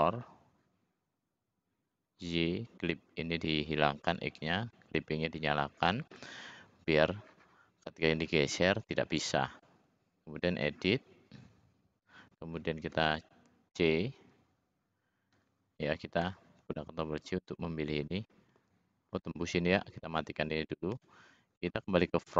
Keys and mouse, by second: 1.7-2.7 middle drag, 2.7-6.1 middle drag, 12.8 c, 16.1 c, 20.8 `.